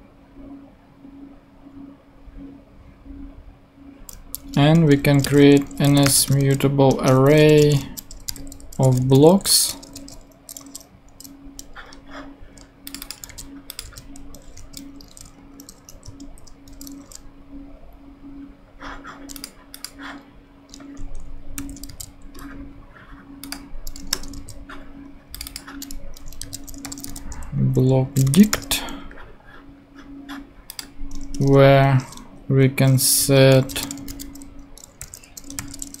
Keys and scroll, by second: 4.5 Return, 5.2-10.6 typing, 6.9 Return, 13.3 super+c, 13.8 super+v, 14.5 super+space, 15.3 a, 15.9 Return, 16.2 super+Right, 16.7 super+;, 17.3 ;, 21.6 shift+super+Left, 21.9 shift+super+c, 22.8 super+c, 24.1 Return, 26.2-28.8 typing, 31.3 Return, 32.3 shift+Return, 32.5 shift+Up, 33.2-36.0 typing.